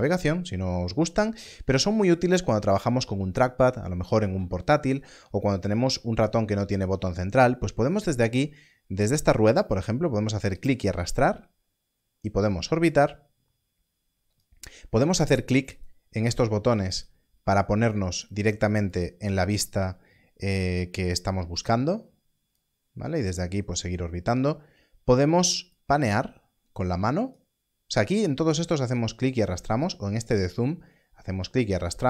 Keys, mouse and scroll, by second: 10.5 click, 29.8 click.